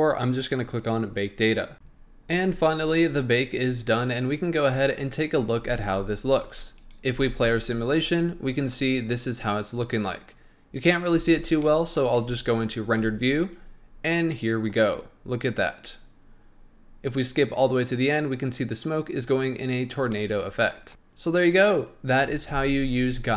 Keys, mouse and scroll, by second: 0.7 click, 1.7-3.0 middle drag, 6.8 click, 7.1 space, 11.6-12.2 middle drag, 12.2 z, 14.3-15.8 middle drag, 15.8-18.9 drag, 20.1-22.0 middle drag, 22.0-22.7 scroll down 1.